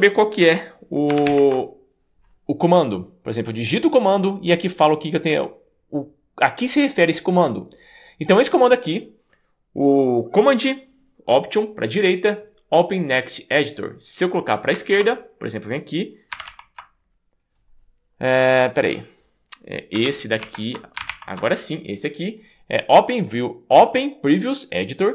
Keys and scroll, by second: 1.3 alt+super+Right, 15.0 super+BackSpace, 16.5 shift+super+Left, 20.4 alt+super+Left, 21.1 alt+super+Left.